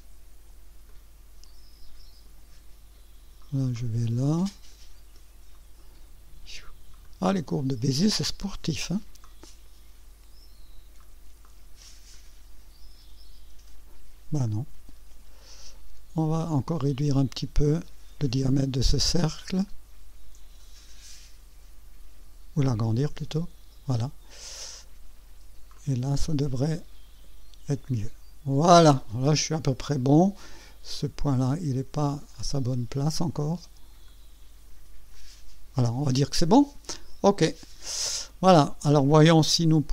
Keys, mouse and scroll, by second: 0.9 click, 3.7-5.4 drag, 7.0 click, 9.2-10.9 drag, 11.4 click, 12.1-13.9 drag, 14.4-15.9 drag, 16.5 click, 19.6-24.0 drag, 25.7 click, 26.7-28.9 drag, 32.3 click, 34.0 click, 35.1 click, 37.4 click.